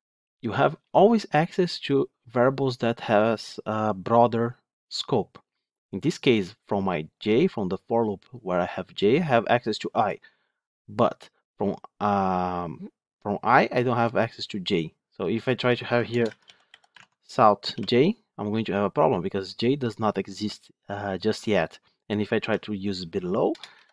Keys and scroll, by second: 16.8 Tab, 21.0 Tab, 22.3 ctrl+x, 23.6 ctrl+v.